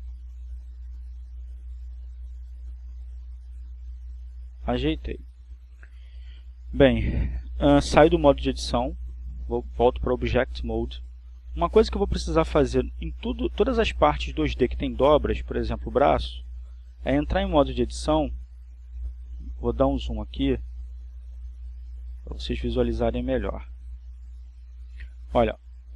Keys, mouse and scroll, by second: 0.2 g, 2.3 click, 3.0 right click, 3.9 g, 8.4 click, 13.2 click, 13.9 click, 20.0 right click, 22.2 Tab, 24.1-25.5 scroll up 2.